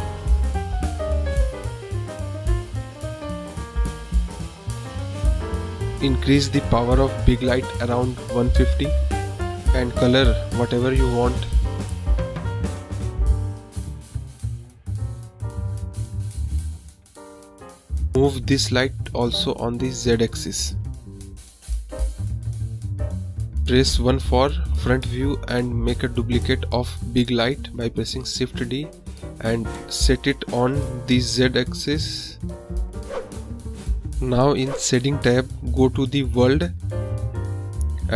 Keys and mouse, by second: 6.2 click, 8.1-9.8 drag, 10.9 click, 15.7 drag, 15.8 middle click, 16.0 middle click, 16.8 click, 17.2 KP_0, 20.1 shift+click, 23.0-23.3 middle drag, 23.4 middle click, 23.8 KP_1, 24.4 shift+d, 27.9 drag, 28.2 drag, 29.7 middle drag, 31.4 click, 33.6 click, 35.4-36.0 drag, 36.4 click.